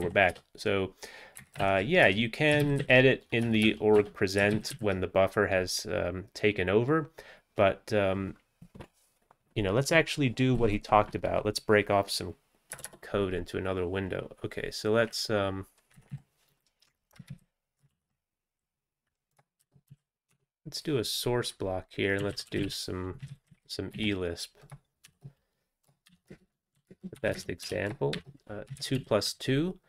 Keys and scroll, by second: 0.1 Down, 0.3 Return, 1.4 Up, 1.6 ctrl+e, 2.1 Return, 2.6 ctrl+x, 2.9 ctrl+s, 3.5 BackSpace, 3.7 BackSpace, 4.0 BackSpace, 4.6 ctrl+x, 4.8 ctrl+s, 12.8 Return, 12.9 Return, 16.1 Left, 16.2 Left, 17.3 alt+x, 18.0 ctrl+g, 19.4-20.4 typing, 22.0-23.2 typing, 23.3 ctrl+x, 23.5 ctrl+s, 24.0 Down, 24.8-28.2 typing, 28.8 ctrl+x, 29.0 ctrl+s.